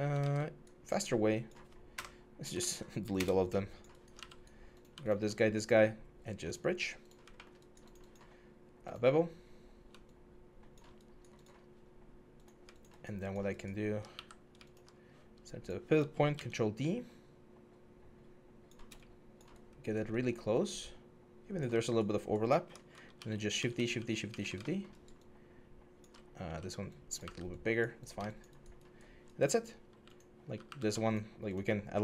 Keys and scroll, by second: 0.0 ctrl+z, 1.7 F12, 2.3 ctrl+z, 2.9 BackSpace, 4.0 q, 13.9 w, 16.1 ctrl+d, 20.3 alt+space, 22.9-24.1 typing, 26.2 r, 27.0 w, 29.7 q, 30.5 w.